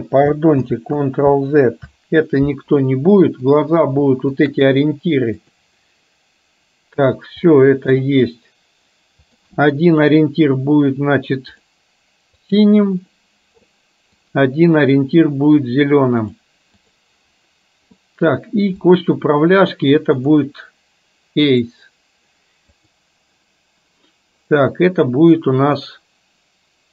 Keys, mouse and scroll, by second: 0.8 ctrl+z, 3.6-4.0 drag, 4.5 shift+click, 7.6-8.0 middle drag, 9.3 click, 11.7 click, 12.7 click, 16.3 click, 18.0-18.3 middle drag, 19.0 click, 20.5-21.8 drag, 22.8 click.